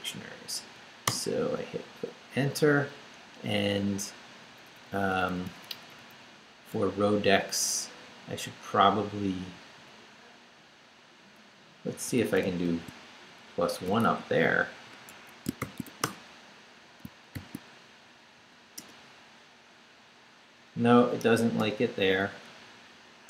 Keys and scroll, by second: 1.1 Return, 2.7 Up, 3.9 Up, 6.7 Left, 9.5 Right, 11.9 i, 12.2 space, 12.6 shift+=, 13.9 shift+space, 14.0 l, 15.1 Escape, 15.4-17.3 typing, 17.0 shift+Return, 17.9 shift+Up, 18.8 Return, 21.6 Return.